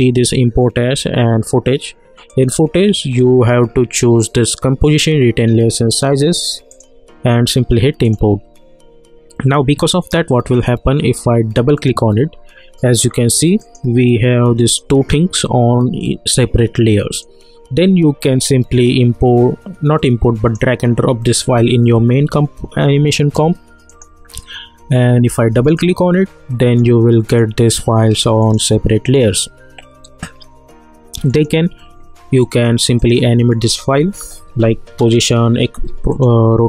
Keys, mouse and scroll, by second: 2.3 click, 6.7 click, 11.5 click, 17.1-20.8 drag, 31.3 click, 34.2 r, 36.1 click.